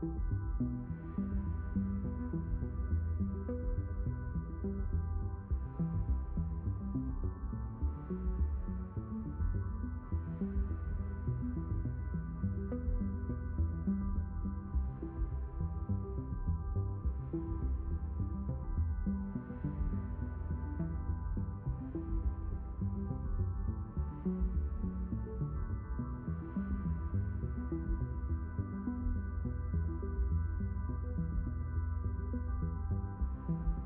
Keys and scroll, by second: 30.5 3, 31.5 Return.